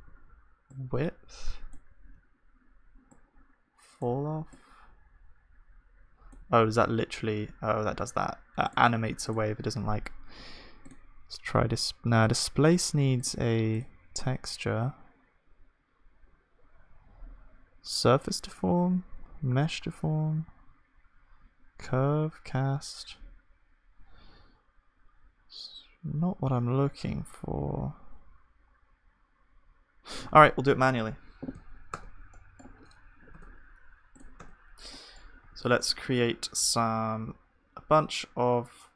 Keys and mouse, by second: 0.0 ctrl+z, 0.0-6.5 drag, 6.5 space, 10.7-32.0 drag, 32.0 Tab, 32.0-34.4 middle drag, 33.3 Tab, 34.4 Tab, 34.4-37.8 drag, 34.4-37.8 right drag, 35.5 ctrl+r, 35.5-37.8 middle drag.